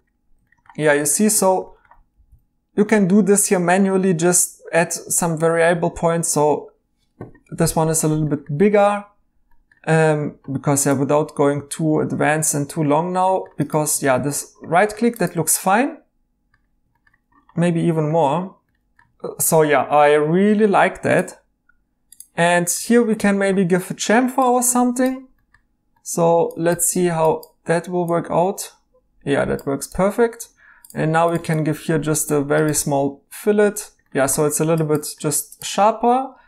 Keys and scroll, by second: 2.1 e, 14.0 e, 17.6 ctrl+z, 19.1 e, 22.8 e, 30.4 2, 32.7 e.